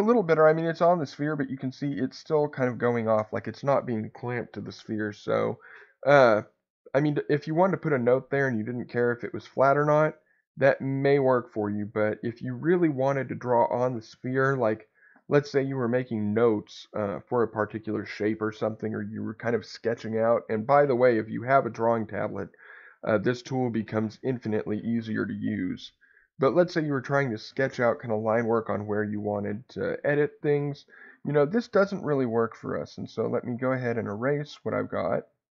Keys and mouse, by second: 32.4-33.5 drag, 34.5 click.